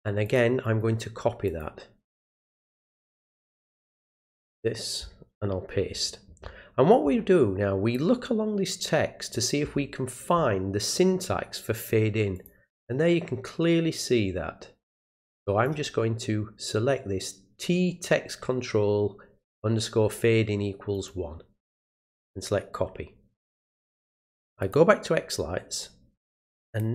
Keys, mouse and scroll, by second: 0.2 click, 0.6 right click, 1.5 click, 2.9 click, 3.9 click, 7.9-9.3 drag, 12.3 click, 12.9-15.6 drag, 20.9 right click, 21.8 click, 24.6 click, 26.7 click.